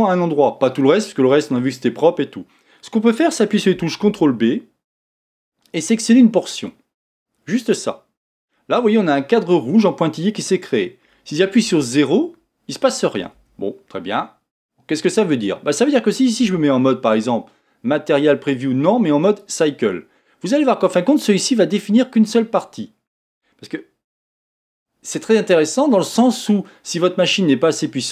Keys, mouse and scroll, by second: 4.2 ctrl+b, 11.7 KP_0, 13.3 KP_0, 16.4 z.